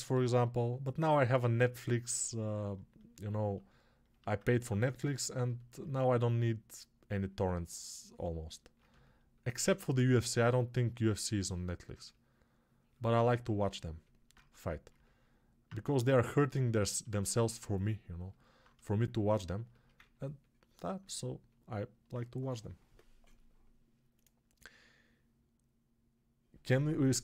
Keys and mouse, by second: 0.0 g, 5.9 1, 18.5-27.2 alt+shift+right drag.